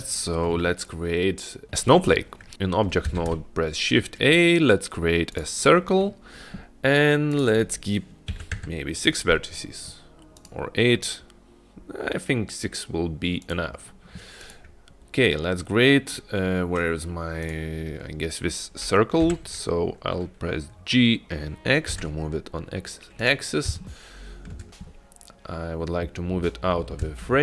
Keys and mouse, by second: 0.8 shift+middle click, 3.4 shift+a, 7.4-9.2 drag, 10.4-13.7 drag, 14.5 click, 17.6 click, 19.3 g, 24.0-24.6 shift+middle drag, 25.9-26.9 middle drag, 27.3-27.4 shift+middle drag.